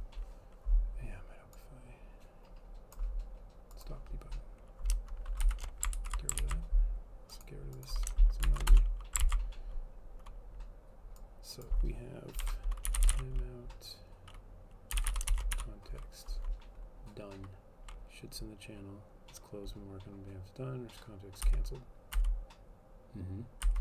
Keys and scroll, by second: 5.6 shift+Down, 6.0 ctrl+/, 6.5 ctrl+s, 8.6 shift+Up, 8.7 Return, 9.3 ctrl+s, 12.5-16.2 typing, 18.0-18.8 typing, 21.6 Down, 22.2 Down, 23.7 Down.